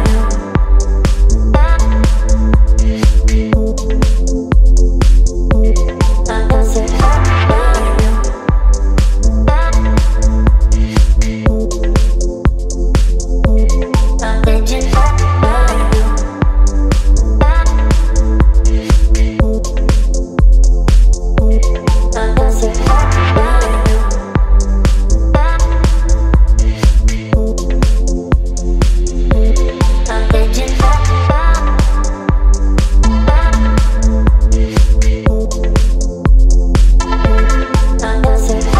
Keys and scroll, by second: 12.2 ctrl+t, 22.4 Return, 24.5-26.0 typing, 28.0 v, 31.7 space.